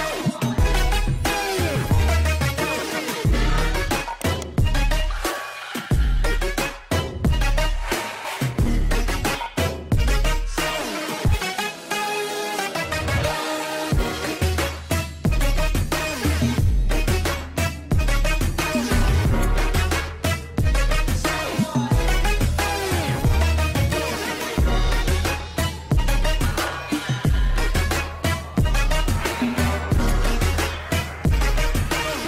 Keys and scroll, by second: 2.6 Escape, 5.3 l, 7.6 shift+Home, 7.9 shift+Page_Up, 8.4 Escape, 14.7 shift+F2, 15.4 alt+b, 25.8 c, 26.4 Escape, 27.7 e, 28.1 Escape, 31.1 shift+Page_Down, 31.5 shift+F2.